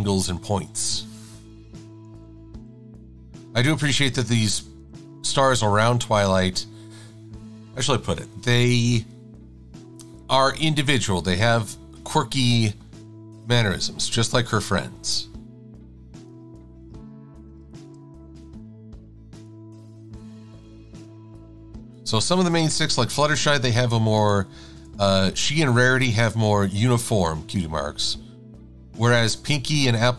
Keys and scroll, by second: 2.1 Down, 2.5 Left, 3.9 Left, 5.1 Right, 17.0 v, 20.1 a, 27.1 Left, 28.3 Down.